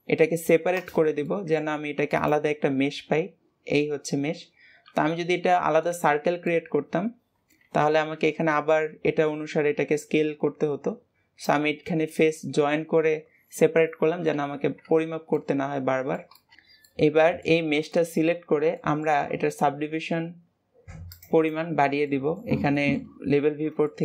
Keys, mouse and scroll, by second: 1.2 middle click, 1.7 Tab, 2.1 click, 6.4-14.2 middle drag, 15.3-16.5 middle drag, 16.8-21.1 middle drag, 21.1-22.1 drag, 22.1-24.0 middle drag.